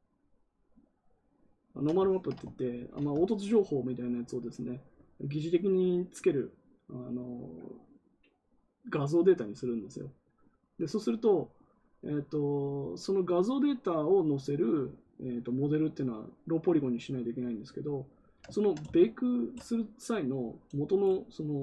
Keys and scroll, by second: 2.6 ctrl+z.